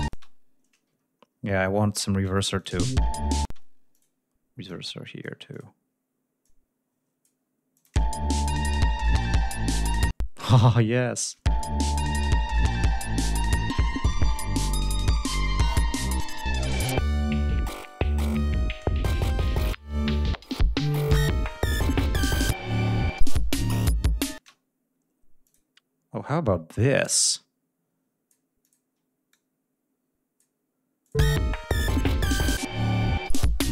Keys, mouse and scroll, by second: 0.0 space, 1.0 ctrl+scroll up 2, 1.3 ctrl+scroll down 2, 1.9 ctrl+scroll up 2, 2.5 ctrl+click, 2.6 ctrl+space, 2.8 ctrl+scroll up 2, 3.4 ctrl+space, 3.9 ctrl+click, 4.6 click, 5.5 click, 6.4 click, 7.7 click, 7.8 space, 10.1 space, 11.2 click, 11.3 space, 13.0 ctrl+scroll down 2, 13.8 ctrl+scroll down 2, 14.0 ctrl+scroll up 2, 15.3 ctrl+scroll up 2, 16.2 ctrl+scroll down 2, 17.2 ctrl+scroll down 2, 17.6 ctrl+scroll up 2, 18.2 ctrl+scroll down 2, 18.4 ctrl+scroll up 2, 19.6-20.2 scroll down 4, 20.3 ctrl+scroll up 2, 22.6 ctrl+scroll down 2, 22.9 ctrl+scroll up 2, 24.3 space, 25.4 click, 26.9-28.4 drag, 28.6 click, 29.3-30.5 drag, 31.0 click, 31.1 space.